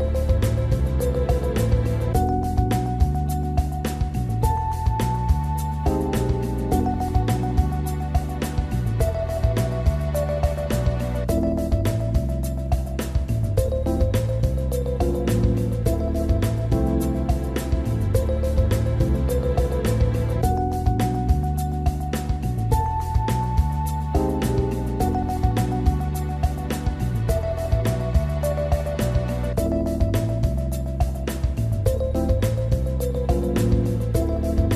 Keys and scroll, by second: 10.1 Delete.